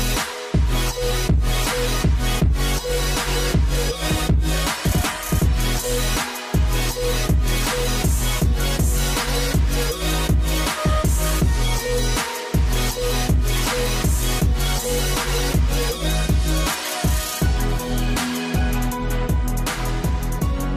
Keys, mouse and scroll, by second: 0.0-0.5 typing, 2.9-7.2 typing, 11.4 v, 12.3-13.9 scroll up 1, 14.8 ctrl+alt+shift+e.